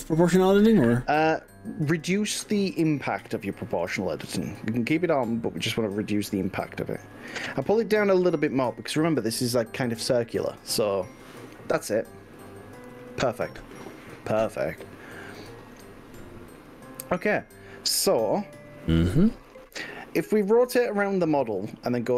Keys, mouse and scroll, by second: 3.0-3.6 scroll up 5, 12.4 click, 13.0 click, 20.8 click.